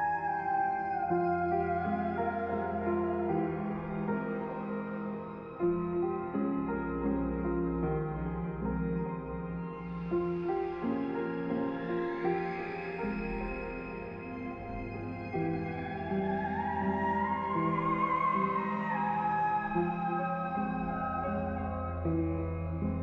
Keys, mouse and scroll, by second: 2.6 click, 10.0 click, 12.6 click, 16.8 click, 18.8 click, 19.6 click, 22.8 click.